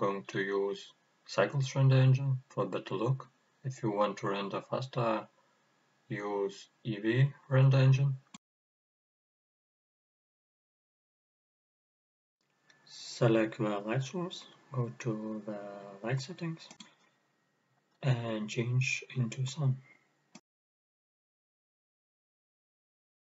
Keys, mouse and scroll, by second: 3.3-9.9 drag, 11.0 click, 13.0 KP_0, 13.7-14.1 scroll down 1, 14.9 middle click, 15.7 click, 17.5 click, 19.2 click, 19.9-22.7 middle drag, 22.7 click.